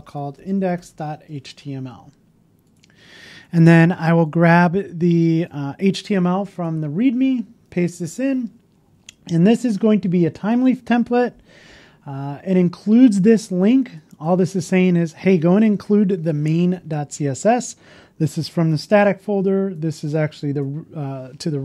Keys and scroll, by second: 5.9 super+c, 7.2 super+v, 7.6 super+v, 7.7 super+s, 7.8 super+s.